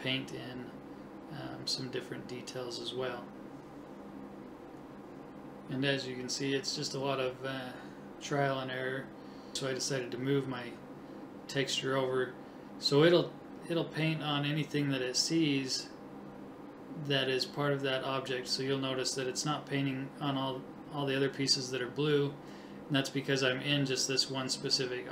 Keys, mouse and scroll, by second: 0.7 right click, 2.7 click, 7.2 right click, 8.7 click, 8.7 right click, 9.9 click, 10.6-13.7 middle drag, 14.0 middle click, 15.0 scroll down 1, 16.1 KP_7, 16.3 middle click, 17.3 middle click, 18.0-19.3 right drag, 18.3 click, 18.6 click, 21.3 click, 21.9 middle click, 22.7 KP_7, 23.0 right click, 24.6 click.